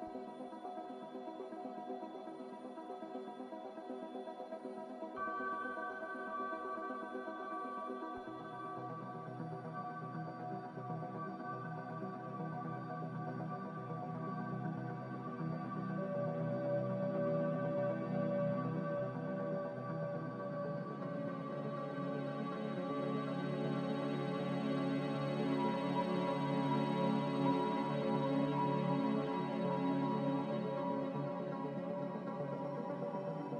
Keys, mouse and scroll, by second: 1.6 click, 10.6 click, 14.9 b, 17.0 Delete, 17.7 Delete, 18.2 z, 19.0 Delete, 22.9 x, 25.2 m, 27.8-28.6 typing, 29.0 Escape, 30.2-31.0 typing, 33.4 ctrl+b.